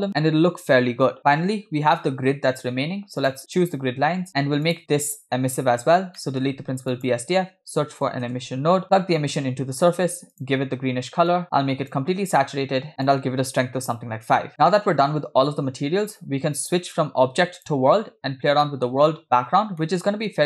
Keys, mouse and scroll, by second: 3.3 click, 4.3-4.6 scroll down 5, 4.7 click, 5.6 x, 6.2 shift+middle click, 6.7 shift+a, 9.2-9.9 drag, 10.4 click, 12.8 scroll up 5, 13.0 middle click, 13.0-14.4 drag, 16.9-17.9 drag, 18.6 scroll down 3, 18.7 middle click, 19.2 scroll up 1, 19.9 middle click.